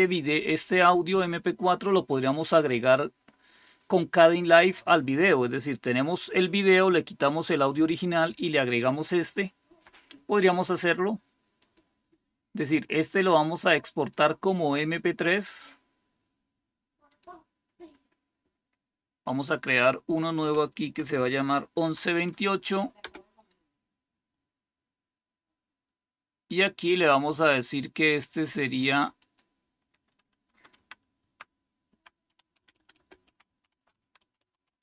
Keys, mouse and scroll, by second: 11.5 click, 13.9 click, 17.0 click, 19.2 click, 19.5 click, 20.6-22.2 typing, 22.9 Return, 27.7 click, 29.1 click, 30.6-34.8 typing.